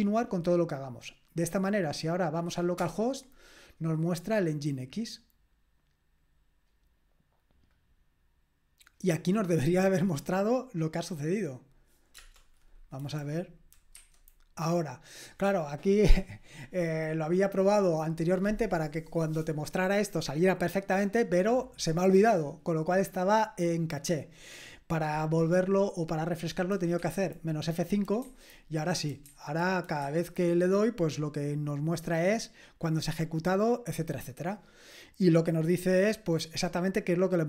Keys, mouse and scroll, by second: 1.5 click, 2.3 click, 2.8 Return, 7.7 click, 11.6 click, 12.2 Return, 14.0 F5, 27.0 F5, 29.2 F5, 30.0 F5.